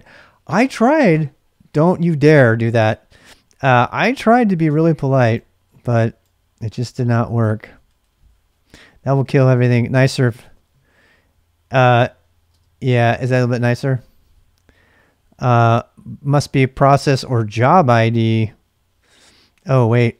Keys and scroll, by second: 9.1 Left, 9.8 Left, 10.1 Left, 10.3 Left, 10.7 Left, 12.5 space, 13.2 Return, 19.5 Up.